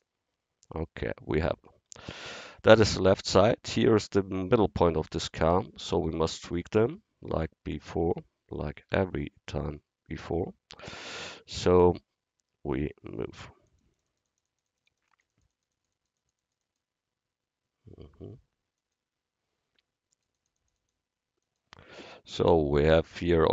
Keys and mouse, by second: 0.0-1.9 drag, 6.4 drag, 8.1-8.9 drag, 8.9 a, 13.4 click, 14.4 click, 16.2-18.6 drag, 18.8-23.4 drag, 23.4-23.5 middle drag.